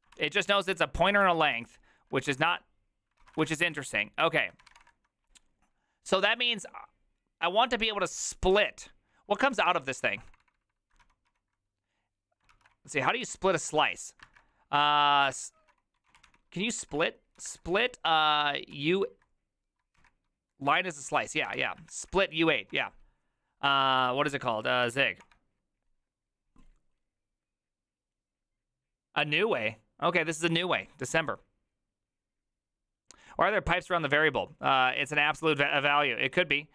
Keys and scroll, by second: 0.1 ctrl+n, 0.7 ctrl+p, 1.0 ctrl+n, 1.1 ctrl+p, 1.2 ctrl+n, 1.3 ctrl+p, 1.4 ctrl+n, 1.5 ctrl+p, 2.2 ctrl+c, 2.5-5.1 typing, 9.5 ctrl+c, 9.6-14.3 typing, 12.5 ctrl+c, 13.2 ctrl+w, 15.3-17.4 typing, 18.7 typing, 19.9 typing, 20.6 ctrl+Left, 21.3-22.5 typing, 24.5-25.4 typing.